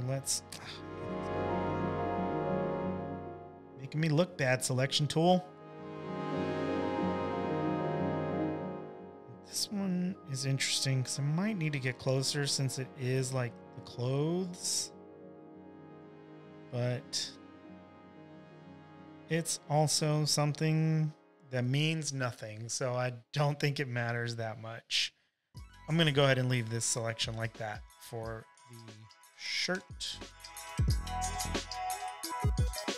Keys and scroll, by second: 0.2 super+z, 29.6 super+j, 30.6-32.9 typing.